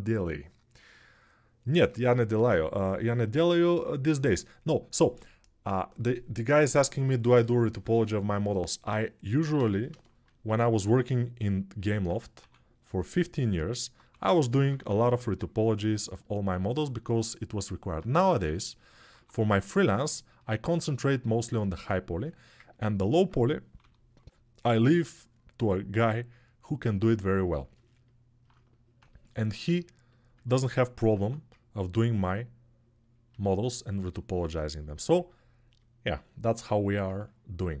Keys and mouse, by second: 12.2 6, 13.9-14.9 typing, 18.9 1, 31.0 1, 36.7-37.8 ctrl+alt+right drag.